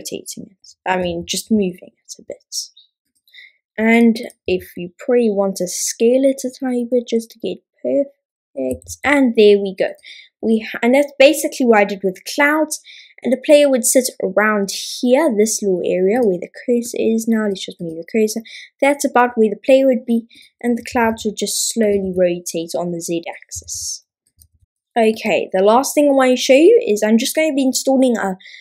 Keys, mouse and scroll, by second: 3.1-4.0 drag, 4.3 click, 8.7 a, 8.8 a, 9.9 click, 16.2-17.9 drag, 20.4-22.0 drag, 20.9 r, 21.9 typing, 24.7 click, 24.7 x.